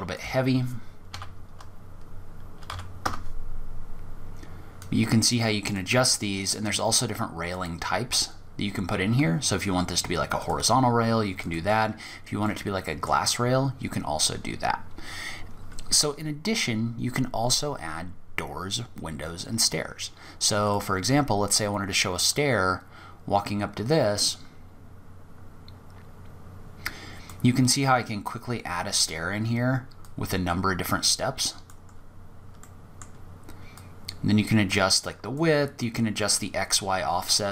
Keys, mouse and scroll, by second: 4.0 click, 5.8 click, 9.6 click, 10.7 click, 11.6 middle click, 13.3-14.6 scroll down 6, 15.1-15.7 scroll down 6, 15.7-18.3 scroll up 2, 18.8-19.1 scroll down 5, 19.1-19.8 scroll up 7, 19.8 click, 21.5 click, 23.3 click, 27.1-28.1 scroll up 7, 28.7-29.2 scroll down 2, 29.2 click, 31.1-31.8 scroll down 6, 31.8 middle click, 32.9 click, 35.0 click.